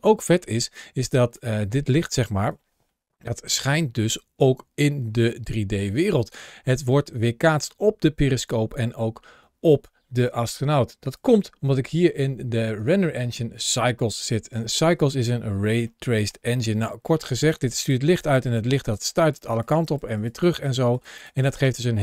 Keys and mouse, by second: 15.7 shift+middle click, 17.1 ctrl+shift+a.